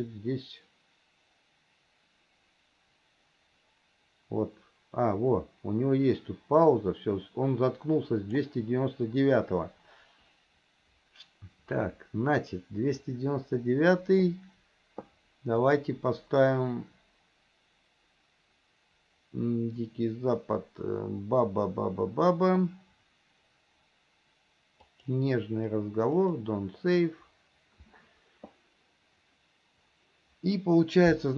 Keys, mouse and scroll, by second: 15.8-29.0 drag.